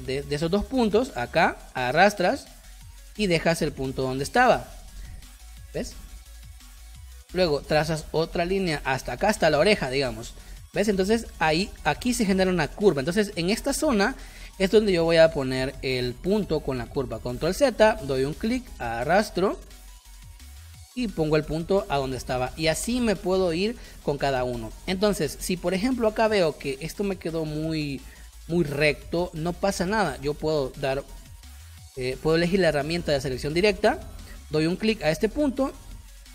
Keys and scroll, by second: 5.5 space, 9.2 space, 17.3 ctrl+z, 22.3 space, 25.1 space, 33.4 a.